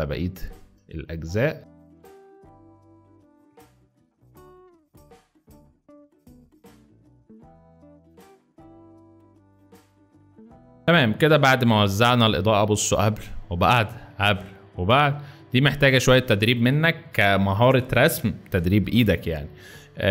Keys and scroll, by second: 0.5 x, 1.6-10.7 typing.